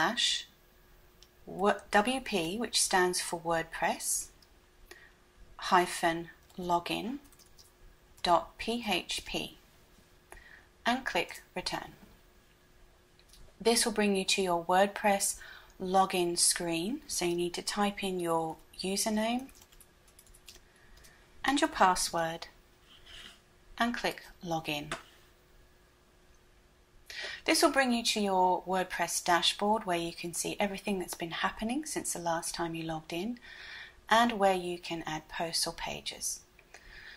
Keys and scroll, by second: 0.0-1.4 typing, 3.9-8.3 typing, 9.4 typing.